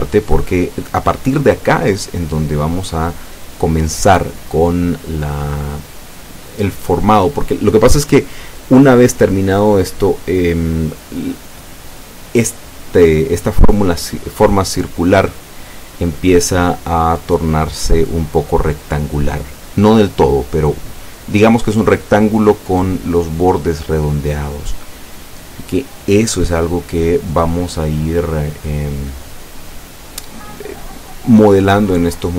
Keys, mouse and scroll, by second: 1.9 s, 3.7 click, 4.2-4.6 scroll down 1, 4.6-5.7 middle drag.